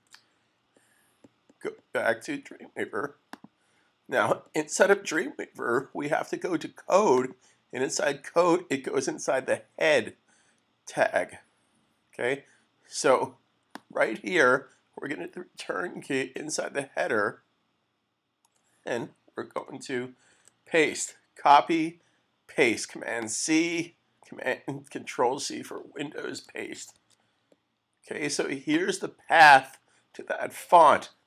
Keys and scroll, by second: 0.0 super+c, 18.5 Return, 20.3 super+v, 26.9 super+s.